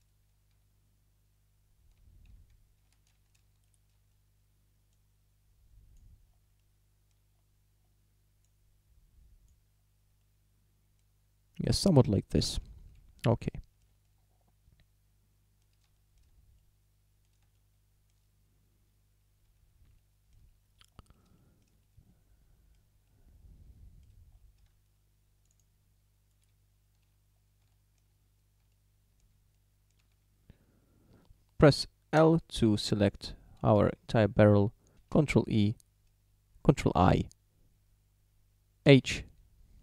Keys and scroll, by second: 2.9 ctrl+z, 12.6 Tab, 26.6 Tab, 30.0 a, 32.2 l, 35.2 ctrl+i, 38.9 h.